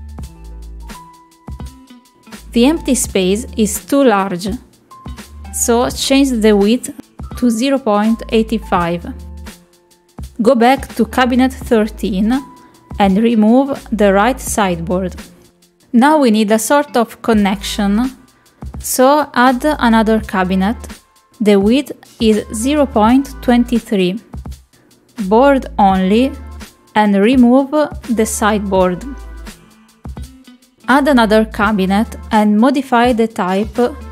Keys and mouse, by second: 2.1 click, 4.7 middle click, 7.3 click, 9.0-11.0 drag, 11.4 click, 12.2 click, 15.1 click, 15.8 middle click, 16.1 shift+middle click, 16.8 click, 18.5 click, 19.9 click, 21.2-24.3 drag, 26.5-28.3 drag, 31.1 click, 33.0 click.